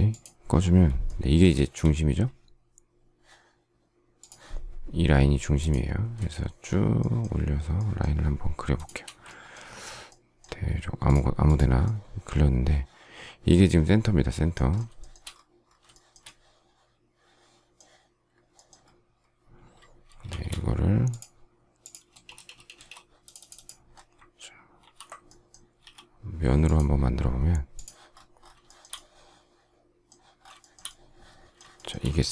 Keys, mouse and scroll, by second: 1.5 shift+middle click, 6.3-7.0 shift+scroll, 7.0 shift+middle click, 7.7 shift+middle click, 8.7 shift+click, 9.0 space, 14.9 shift+middle click, 15.1 shift+double middle click, 16.1 shift+middle click, 20.2 shift+e, 22.0 space, 24.7 ctrl+g, 25.7 s, 28.7 shift+middle click, 30.5 shift+middle click, 31.7 shift+middle click.